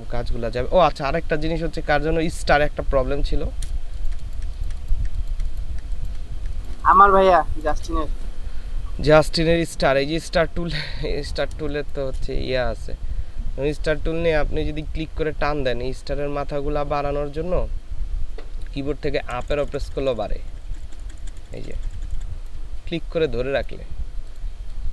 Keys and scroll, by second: 5.1 ctrl+space, 6.5 ctrl+space, 11.6 space, 19.4 Up, 19.6 Up, 19.8 Up, 19.9 Up, 20.0 Up, 20.2 Up, 20.5 Up, 20.7 Up, 21.0 Up, 21.2 Up, 21.4 Up.